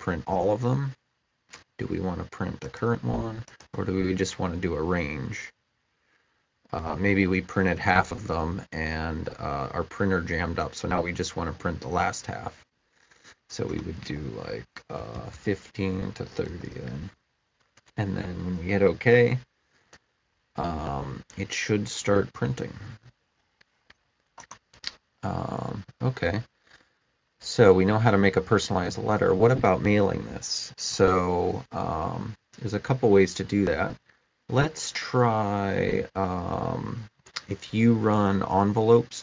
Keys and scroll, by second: 14.6-16.8 typing.